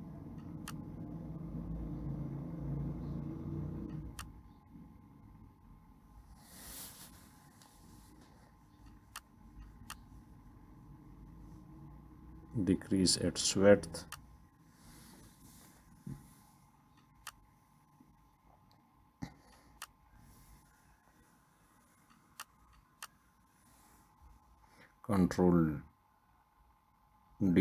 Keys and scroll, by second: 21.2 Left, 21.3 Left, 27.2 Left, 27.4 Left.